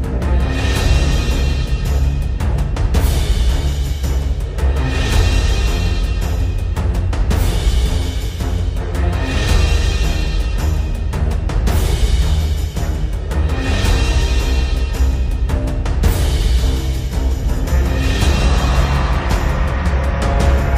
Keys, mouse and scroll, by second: 0.6-4.0 drag, 4.9 v, 5.5-7.0 drag, 8.4-9.9 drag, 10.6-11.2 drag, 18.4 click.